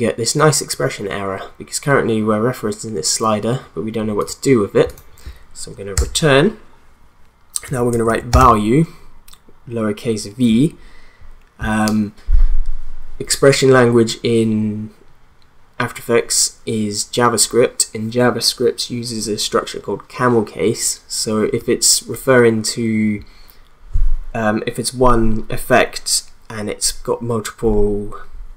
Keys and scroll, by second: 5.9 Return, 7.4-8.9 typing.